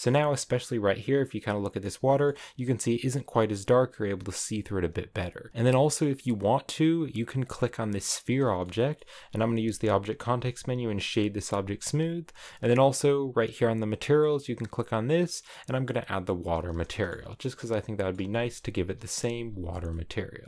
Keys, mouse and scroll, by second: 2.2-5.2 middle drag, 5.2 shift+click, 5.5 shift+middle click, 6.1 scroll up 3, 7.4-8.5 right drag, 8.5 shift+middle click, 8.9-9.3 scroll up 2, 11.0 w, 14.3-16.8 drag, 16.8 shift+middle click, 17.1 a, 17.3 middle click, 17.7 middle click, 18.1-18.7 scroll up 1, 18.7 KP_0, 19.4-19.8 scroll down 2, 19.8-20.4 shift+middle drag.